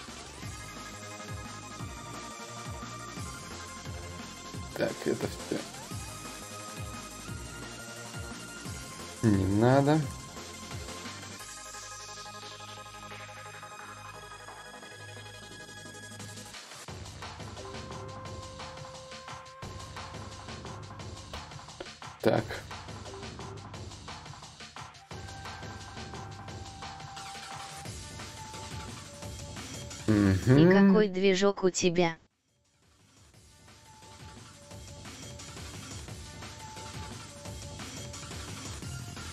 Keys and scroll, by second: 6.2 ctrl+d, 21.0 ctrl+d.